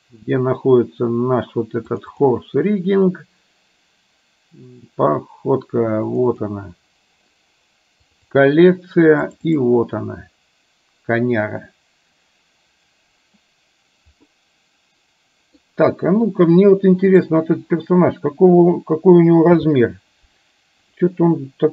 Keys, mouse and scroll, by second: 14.5-15.6 middle drag, 17.3 drag, 19.6 n.